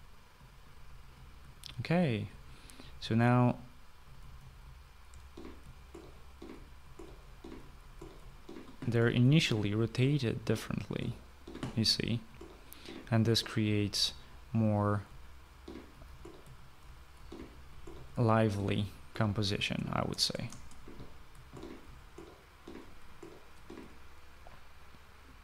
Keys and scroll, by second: 0.6-11.0 typing, 12.4 typing, 13.5-24.6 typing.